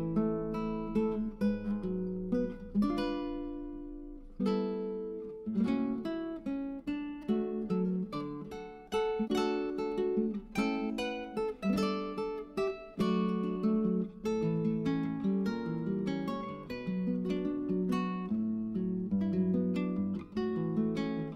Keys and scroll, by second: 1.5-4.2 typing, 6.4-9.1 typing, 12.8-13.4 typing.